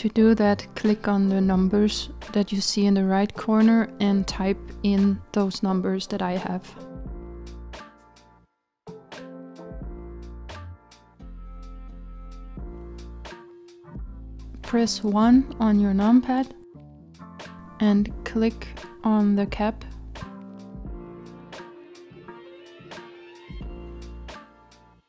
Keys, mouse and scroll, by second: 10.3-10.9 scroll up 5, 11.1 scroll up 3, 14.7 KP_1.